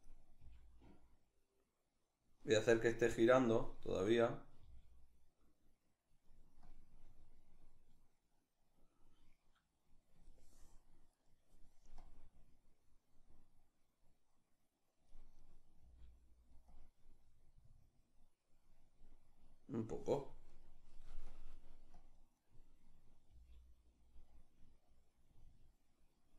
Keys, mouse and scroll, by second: 0.0 g, 2.6 right click, 3.7 right click, 4.3 g, 5.9 click, 6.5-10.8 drag, 10.8 right click, 11.7-15.0 drag, 15.0 right click, 15.5 g, 16.3-20.1 drag, 20.1 right click, 20.9-22.1 drag, 22.1 right click, 22.9 g, 24.0-26.3 drag.